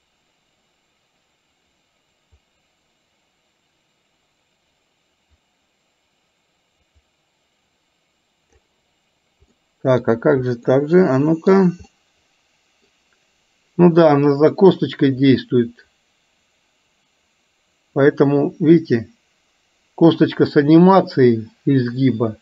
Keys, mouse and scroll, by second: 9.7 middle click, 10.7-11.6 middle drag, 12.1-12.9 middle drag, 14.8-22.4 drag.